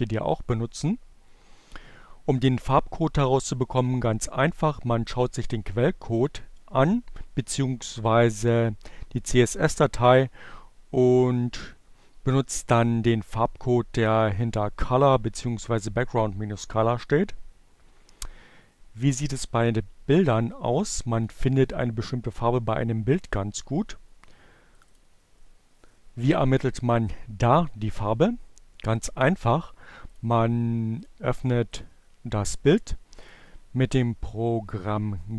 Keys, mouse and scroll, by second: 19.8-21.2 drag, 24.2 click, 27.8-29.0 drag, 30.0 click, 30.9 click, 31.5 right click, 33.0 click.